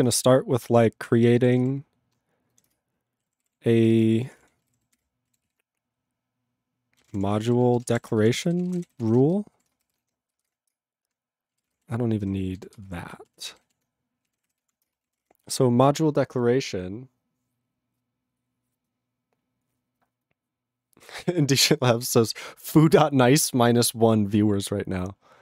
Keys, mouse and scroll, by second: 0.0 Return, 0.9 ctrl+/, 2.9 ctrl+Return, 3.3 ctrl+=, 3.8 ctrl+n, 4.0 ctrl+a, 4.2 ctrl+o, 4.4 Tab, 4.7 ctrl+=, 5.0 ctrl+l, 5.5 ctrl+s, 6.8-10.4 typing, 10.7 Return, 11.5 ctrl+e, 11.6 ctrl+space, 11.7 ctrl+p, 12.3 ctrl+/, 12.6 ctrl+n, 12.8 ctrl+space, 12.9 ctrl+e, 13.0 ctrl+b, 13.3 ctrl+e, 13.6 ctrl+b, 13.6 ctrl+w, 14.1-15.2 typing, 15.2 Tab.